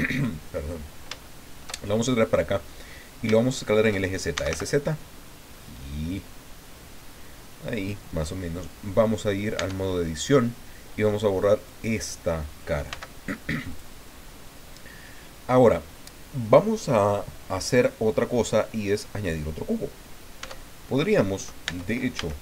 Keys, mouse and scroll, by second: 0.1 click, 0.5-2.4 middle drag, 2.6 middle click, 2.9-3.9 middle drag, 4.1-5.0 typing, 7.7 click, 9.6 Tab, 11.6 right click, 12.9 x, 13.7 click, 14.5-15.6 drag, 20.4 Tab, 21.6 Tab, 22.2 a.